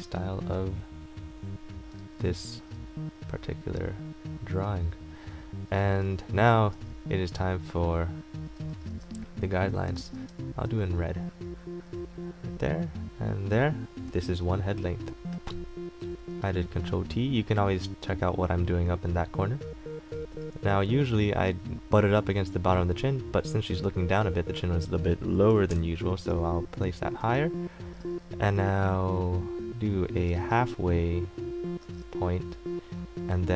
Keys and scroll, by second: 6.9 a, 9.0 ctrl+z, 10.8 x, 14.4 ctrl+t, 25.9 KP_Enter, 28.2 a, 30.7 ctrl+z.